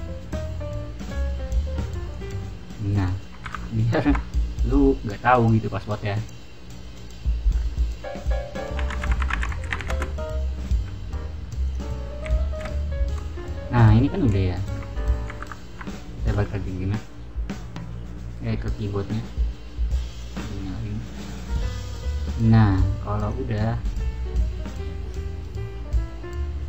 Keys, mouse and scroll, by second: 2.0 click, 11.6 click, 20.0 click, 23.1 click.